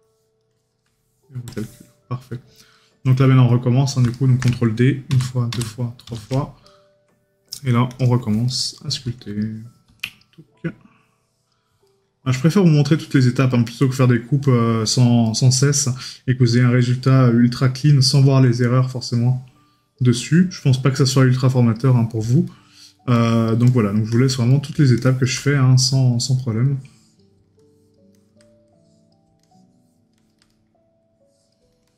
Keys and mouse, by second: 2.8 right click, 4.2 right click, 6.7 right click, 8.5 right click, 11.9 right click, 13.6 right click, 15.3 right click, 20.3 right click, 24.6 right click, 30.6 right click.